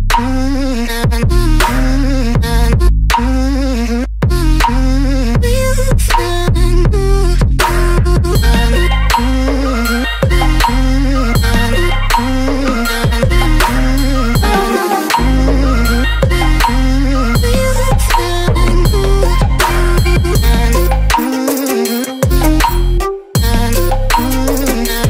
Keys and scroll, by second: 14.6 ctrl+a, 20.3 Delete, 23.9 Left, 24.5 Down.